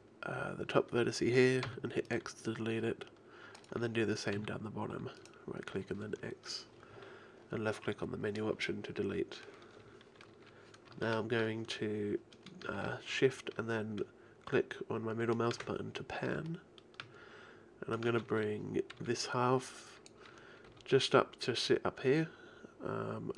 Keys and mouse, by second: 1.7 x, 3.6-7.5 right drag, 4.4 x, 13.3-16.3 middle drag, 16.5-19.0 middle drag, 19.0 b, 20.7 g.